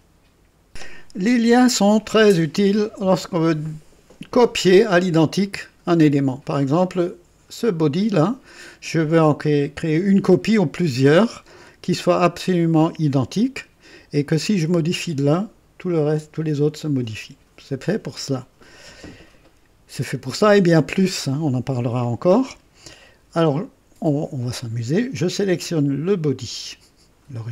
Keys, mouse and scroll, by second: 0.7 click, 6.5-6.9 scroll up 2, 7.6 click, 26.4 click.